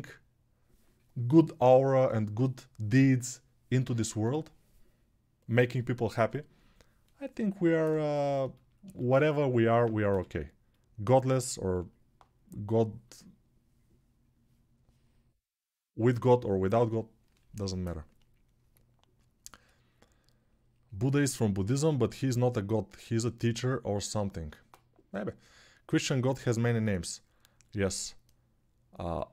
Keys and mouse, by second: 9.8 g.